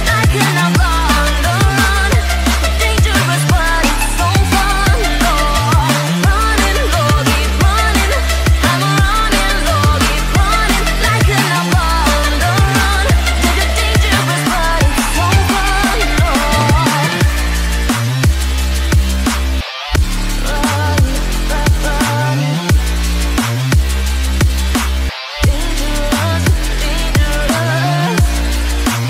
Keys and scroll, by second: 3.4 ctrl+t, 9.5 ctrl+z, 26.3 ctrl+alt+z.